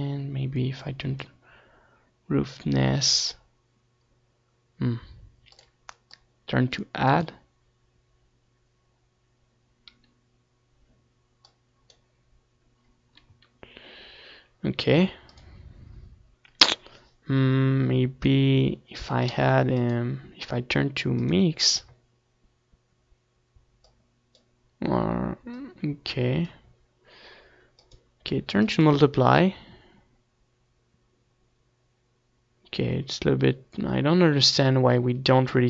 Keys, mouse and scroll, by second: 4.5-7.0 drag, 9.4-10.9 drag, 15.1-17.0 drag, 18.6 ctrl+s, 25.0 click, 27.6-31.0 drag, 27.6-29.0 middle drag, 31.4-33.2 drag.